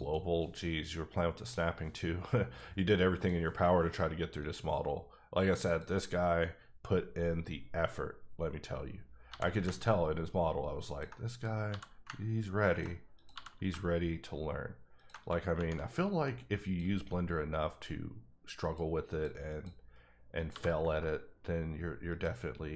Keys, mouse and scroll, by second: 2.4 click, 3.1 click, 4.4 click, 5.6 click, 9.3 g, 10.9 click, 11.7 g, 12.7 click, 13.3 g, 14.9 click, 15.5 shift+Tab, 16.6 click, 18.6 click, 19.1 click, 20.5 g, 22.1 click.